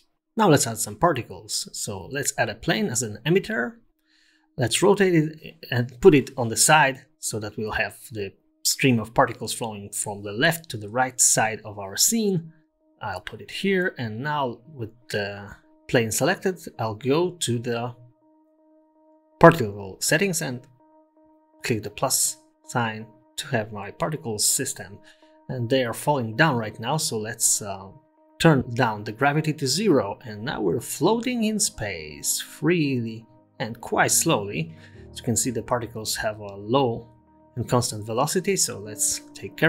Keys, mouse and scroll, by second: 0.2-0.5 scroll up 4, 1.6 r, 6.5 g, 9.6 KP_0, 10.4-10.8 scroll up 1, 10.8 scroll down 1, 10.9-11.3 scroll down 2, 11.3 g, 13.0 scroll down 1, 13.5 click, 13.8 Tab, 14.0-14.7 scroll up 2, 14.3 Tab, 14.9-15.6 scroll down 1, 15.6 scroll down 1, 16.7 click, 17.6 click, 19.4 click, 21.0 click, 22.5 space, 23.8 space, 24.8-26.0 scroll down 10, 26.9 click, 28.9 click, 30.6 space, 33.5-34.7 scroll down 5, 34.7 scroll down 2, 34.7 space, 35.0 middle click, 35.4 scroll up 1, 35.6-35.9 scroll down 5, 36.1 middle click, 36.6 space, 37.5 space, 37.8-38.1 scroll up 3, 38.2 click.